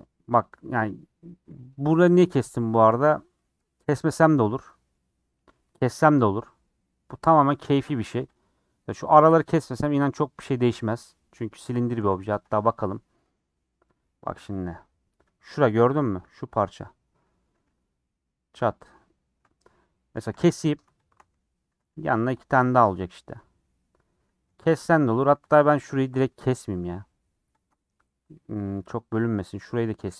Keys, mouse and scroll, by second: 0.6-1.2 scroll up 2, 1.2 middle click, 1.6 scroll up 3, 1.8-4.2 middle drag, 4.6-8.3 middle drag, 8.3 alt+click, 9.6-11.8 middle drag, 11.8 a, 12.0 u, 16.5 3, 16.7 click, 20.2 2, 20.4 alt+click, 21.6 a, 21.8 u, 24.1 scroll down 3, 24.2-24.7 scroll up 1, 24.7 middle click, 25.5 alt+click, 26.1 alt+shift+click, 26.3 middle click, 27.2 alt+shift+click, 27.6 alt+shift+click, 28.2 scroll down 2, 28.3-29.5 middle drag, 29.5 alt+click.